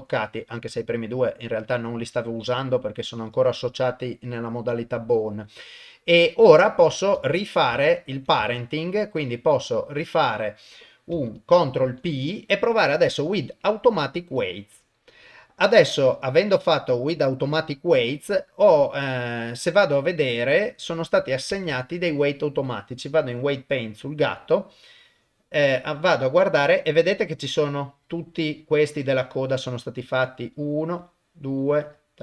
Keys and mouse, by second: 7.2 ctrl+s, 8.6 shift+click, 11.9 ctrl+p, 18.4 click, 19.0 click, 21.7 ctrl+Tab, 25.0 middle click, 26.0 middle click, 27.2-28.9 drag, 29.5 click, 31.0 click, 31.8 click.